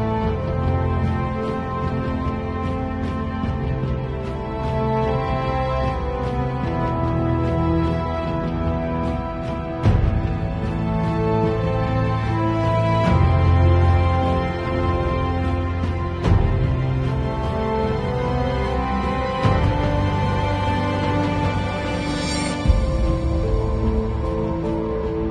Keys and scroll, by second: 6.3 alt+shift+space, 10.7 Return, 15.0 b, 19.5 [.